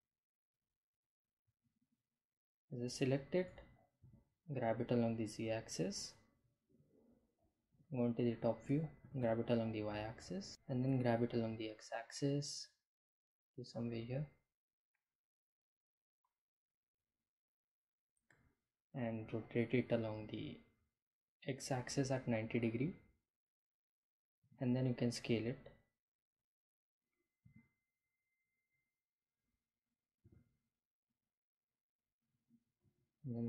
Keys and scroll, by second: 1.3 g, 1.9 z, 4.8 Home, 6.1 g, 6.3 y, 10.5 g, 10.6 x, 14.1 Delete, 18.5 r, 19.2 x, 19.4 9, 20.0 0, 20.9 Return, 23.4 s, 26.3 s, 28.9 g, 29.5 z, 33.0 g.